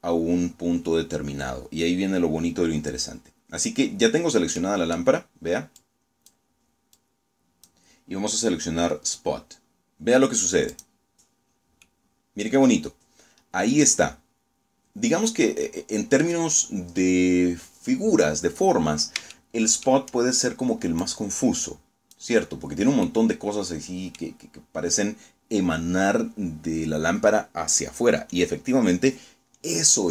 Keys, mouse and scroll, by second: 2.9-3.3 scroll down 2, 3.5-4.0 middle drag, 4.7-5.3 drag, 5.8-6.7 drag, 9.6 click, 10.4 scroll down 2, 10.7-15.3 middle drag, 16.6-17.1 scroll up 1, 17.7-18.0 scroll down 2, 18.2-18.9 shift+middle drag, 19.9-21.2 drag, 21.6 scroll down 2, 21.9-23.3 middle drag, 23.8-24.1 scroll down 2.